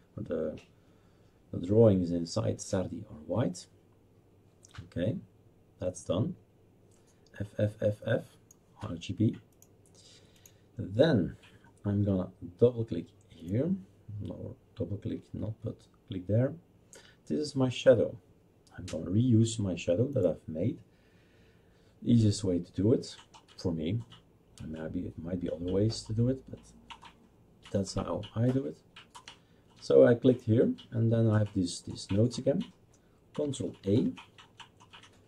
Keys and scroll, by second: 33.8 ctrl+a.